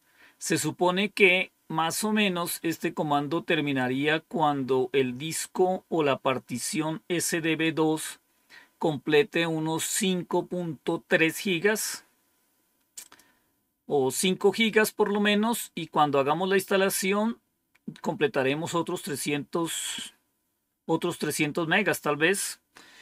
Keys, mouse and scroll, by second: 3.7-5.2 drag, 12.9 click.